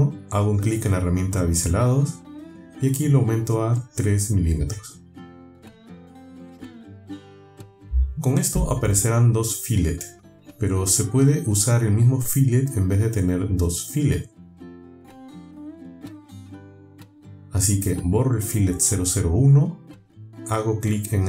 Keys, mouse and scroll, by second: 0.7 click, 2.3 click, 4.5 click, 4.9 click, 6.4 click, 7.9 click, 10.8 click, 11.8 click, 12.4 click, 19.9 Delete.